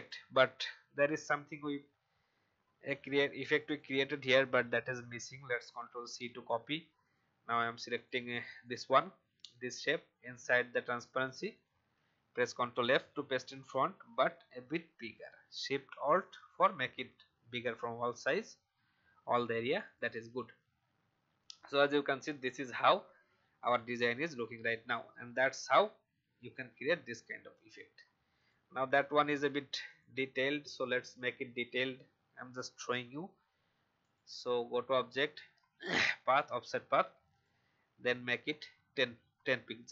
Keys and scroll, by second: 5.6 ctrl+c, 12.1 ctrl+f, 30.8 Delete.